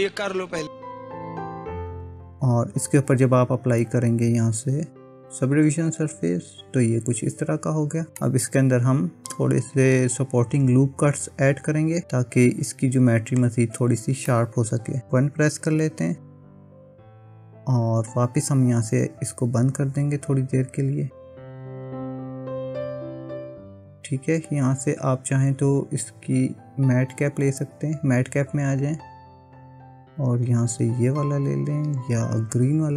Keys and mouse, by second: 1.7 middle click, 5.4 click, 8.2-12.0 middle drag, 14.3 middle click, 15.1 KP_1, 19.6 click, 21.6 click, 25.4-32.9 drag.